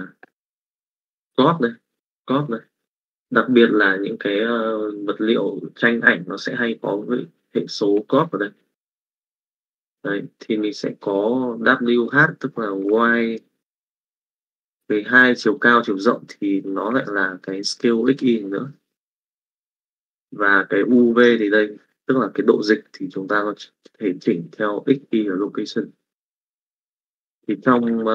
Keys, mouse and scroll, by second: 13.3 middle click, 14.4 middle click, 24.6 click, 27.2 click.